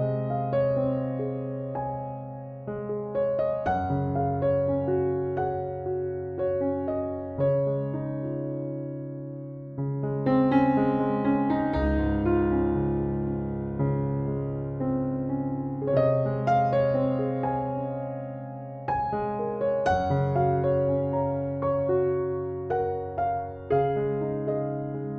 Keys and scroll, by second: 0.7 BackSpace, 4.1 typing, 6.5 BackSpace, 18.4 BackSpace.